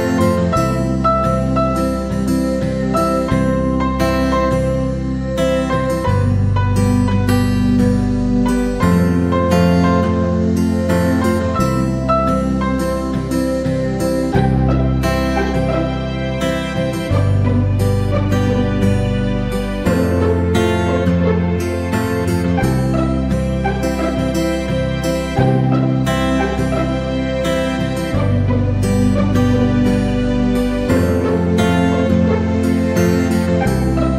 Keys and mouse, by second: 1.1 KP_7, 2.0 shift+middle click, 2.6 g, 3.9 g, 7.0-7.7 middle drag, 8.4 KP_7, 9.1 shift+d, 9.4 r, 10.7 g, 13.6 KP_1, 14.4-15.7 right drag, 15.7 g, 18.7 KP_3, 19.5 shift+middle click, 20.5 g, 24.6 KP_1, 25.5 shift+middle click, 26.1 shift+a, 28.8 shift+middle click, 29.4 Tab, 30.0 s, 31.3-31.6 shift+middle drag, 32.0 shift+middle drag, 32.6 w.